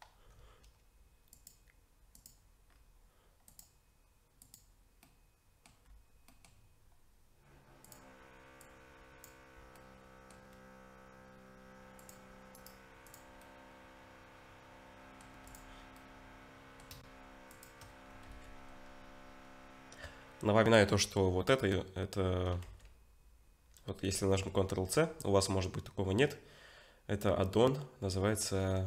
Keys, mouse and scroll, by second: 1.3 click, 2.7-3.5 scroll down 2, 3.5 click, 3.5 scroll down 1, 5.0 middle click, 5.8-6.3 scroll up 2, 6.3 middle click, 7.8 click, 9.8 middle click, 12.0 click, 12.6 right click, 13.4 middle click, 15.5 click, 16.0 middle click, 17.5 shift+click, 18.3 ctrl+c, 22.6 ctrl+c, 24.1 ctrl+c.